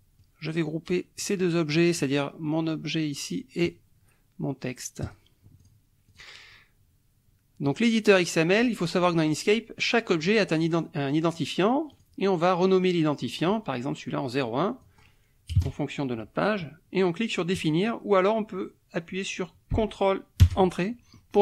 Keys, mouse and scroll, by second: 0.2-1.4 drag, 5.0 click, 5.6 click, 6.1 click, 7.7 click, 11.9 click, 14.8 click, 15.5 KP_0, 15.6 KP_1, 17.5 click, 20.4 ctrl+Return.